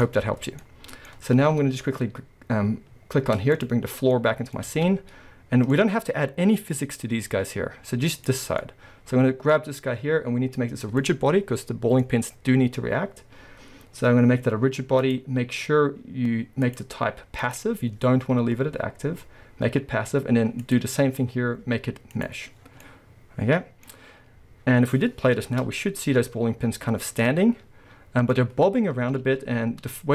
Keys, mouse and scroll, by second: 0.5 scroll down 2, 3.6 click, 3.9 scroll down 2, 4.0-4.6 middle drag, 4.6 scroll up 1, 4.7 alt+a, 4.7-8.2 middle drag, 8.2 click, 8.6-11.0 middle drag, 9.5-11.0 scroll up 2, 11.0 click, 11.6-15.0 middle drag, 12.1-15.0 scroll up 2, 15.0-22.8 drag, 22.6 scroll down 2, 22.8-25.6 middle drag, 23.9-25.2 scroll up 2, 25.2 scroll up 1, 25.5 space, 28.4 scroll up 2, 29.9 space.